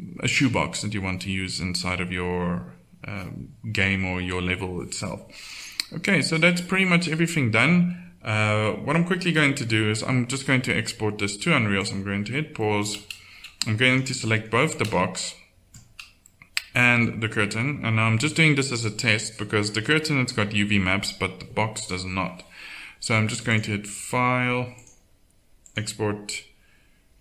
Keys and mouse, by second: 5.4-8.0 middle drag, 12.6-16.8 drag, 16.8 middle click, 17.3 click, 18.7-22.5 drag, 23.7-26.6 drag.